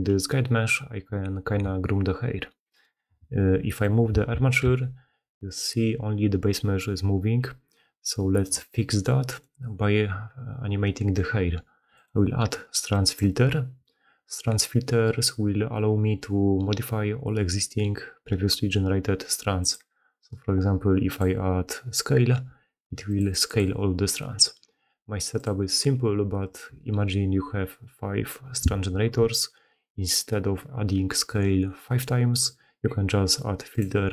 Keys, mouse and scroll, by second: 1.5 Tab, 3.6 click, 4.5 g, 8.8 click, 12.0-13.4 drag, 19.6-21.2 drag, 23.0-23.6 drag.